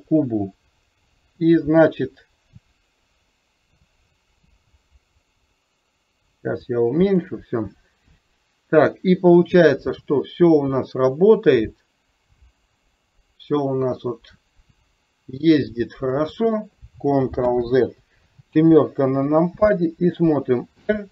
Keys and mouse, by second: 1.4 r, 8.4 click, 9.8-16.3 drag, 17.5 ctrl+z, 18.7 KP_7, 20.9 r.